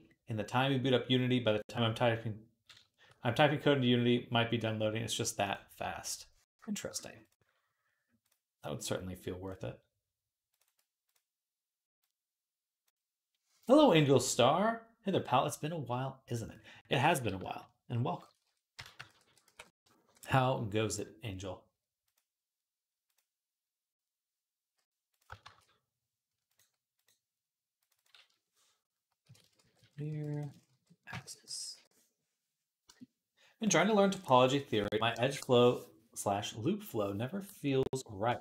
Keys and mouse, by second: 5.3 click, 5.3-7.1 middle drag, 7.1-8.7 drag, 8.7-10.5 middle drag, 19.1 shift+d, 25.3 shift+a, 26.9 click, 29.2-38.4 shift+drag, 29.9 r.